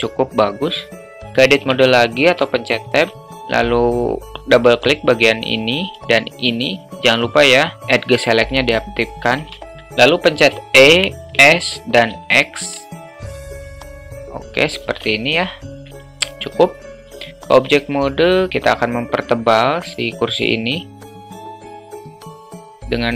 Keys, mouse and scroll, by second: 1.6 Tab, 2.6 alt+shift+middle click, 5.1 click, 5.3 click, 6.3 shift+click, 6.5 shift+click, 9.7 shift+middle click, 10.5 e, 15.2-16.4 alt+middle drag, 17.5 Tab, 18.9 alt+middle drag, 19.7 middle drag, 21.8-23.1 drag.